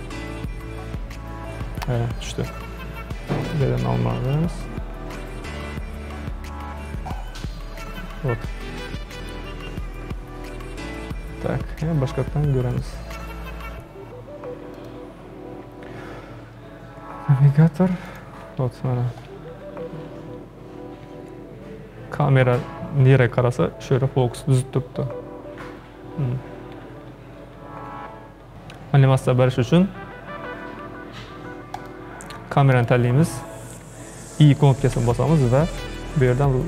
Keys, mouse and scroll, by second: 3.4-7.2 drag, 12.8-15.9 drag, 31.8 click, 32.8 click.